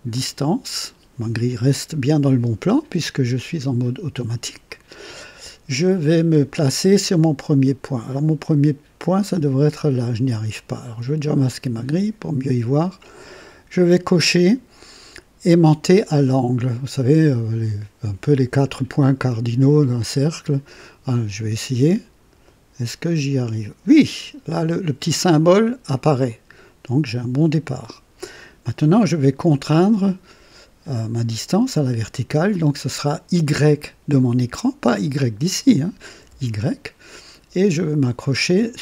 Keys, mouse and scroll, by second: 0.0 click, 7.8 scroll up 2, 11.4 click, 20.0 click, 26.2 click, 36.1 y.